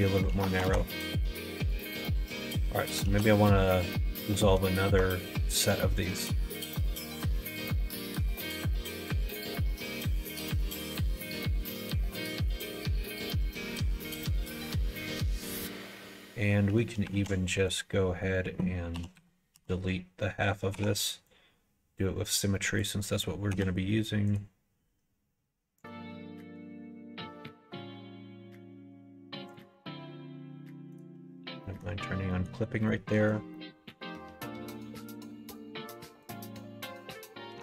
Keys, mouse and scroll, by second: 0.3 ctrl+z, 0.5 ctrl+z, 0.6 ctrl+z, 1.0 middle click, 1.6 click, 1.9 middle click, 2.5 2, 3.0 alt+z, 3.4 middle click, 4.2 2, 4.9 alt+click, 6.7 click, 9.7 x, 11.5 click, 16.1 middle click, 17.1 alt+z, 17.6 click, 17.9 middle click, 18.9 KP_1, 19.1 KP_3, 19.5 KP_1, 20.7 3, 21.0 click, 21.2-22.7 drag, 23.5 x, 25.8-29.5 drag, 30.9 click, 31.6 middle click, 32.2 middle click, 32.8 middle click, 33.5 middle click, 34.9 2, 35.4 alt+click, 36.2 alt+click.